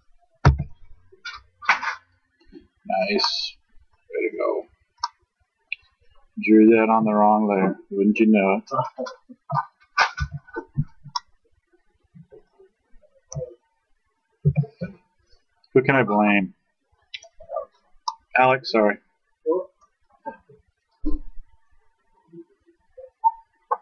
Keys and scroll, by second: 0.5 ctrl+h, 7.7 ctrl+h, 10.2 ctrl+z, 14.4 ctrl+z.